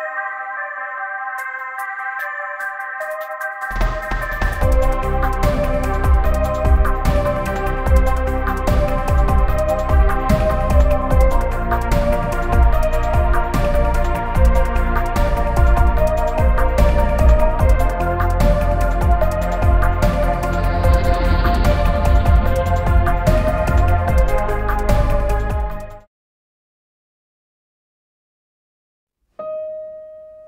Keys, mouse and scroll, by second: 0.6 t, 0.9-1.4 scroll up 3, 1.6 h, 2.0 s, 2.1 scroll up 2, 3.5 Escape, 3.5 scroll up 2, 3.9 Escape, 4.3 Escape, 4.4 scroll up 2, 4.7 scroll down 2, 4.8-5.1 scroll up 4, 4.9-9.5 typing, 5.2 scroll down 2, 5.3 scroll up 2, 5.5 scroll down 2, 5.8 scroll up 2, 6.3-6.9 scroll down 2, 7.1-8.1 scroll up 3, 8.1 scroll down 1, 9.6 click, 10.3 F2, 10.5 F2, 10.7 2, 10.8 scroll down 2, 11.4 scroll up 2, 11.8-13.1 typing, 12.4 scroll up 2, 12.7 scroll down 2, 12.8 scroll up 2, 12.9 scroll down 2, 12.9 middle click, 13.0 scroll up 2, 13.0 scroll down 2, 13.5-14.5 scroll up 10, 14.8 scroll down 2, 14.9 middle click, 15.7 middle click, 16.5 scroll up 1, 16.6 middle click, 17.9 scroll down 1, 17.9 middle click, 21.5-22.7 middle drag, 23.7 space, 24.3 middle click, 25.2 middle click, 29.1 scroll up 1.